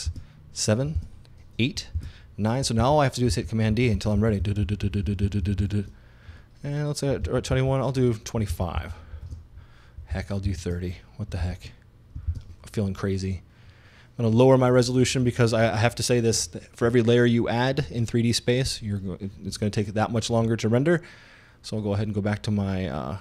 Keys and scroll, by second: 7.3 super+d.